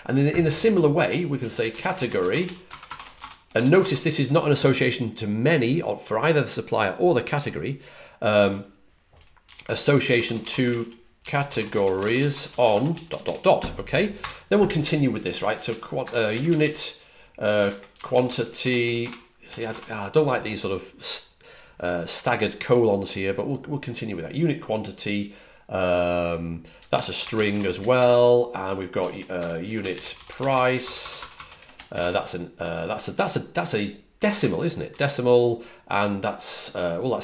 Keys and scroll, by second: 1.2-3.7 typing, 10.0 typing, 11.1-13.5 typing, 16.0-19.2 typing, 27.0-31.4 typing, 36.9-37.2 typing.